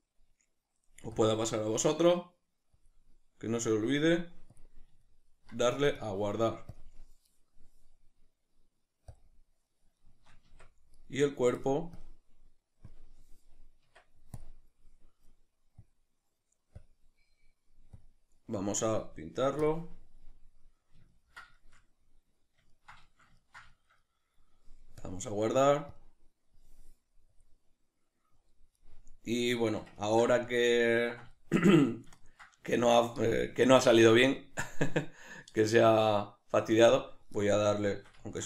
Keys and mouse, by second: 5.1-6.8 ctrl+middle drag, 6.8-10.0 drag, 10.0 shift+middle click, 10.6 Tab, 11.0-12.9 right drag, 12.9-20.8 drag, 14.4 Tab, 20.8-26.1 middle drag, 26.1-28.8 drag, 28.8-38.4 middle drag.